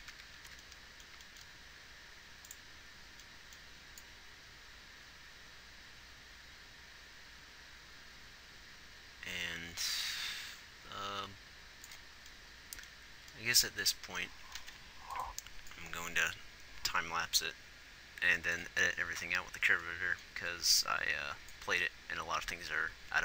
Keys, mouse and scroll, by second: 1.2 z, 15.3 ctrl+s.